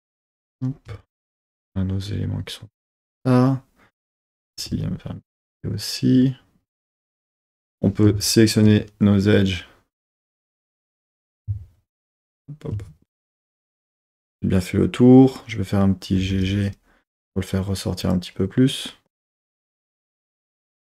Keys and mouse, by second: 0.9 z, 4.1 click, 4.6 g, 4.8 g, 5.4 click, 7.4 2, 8.2 alt+shift+click, 16.3 g, 18.0 click.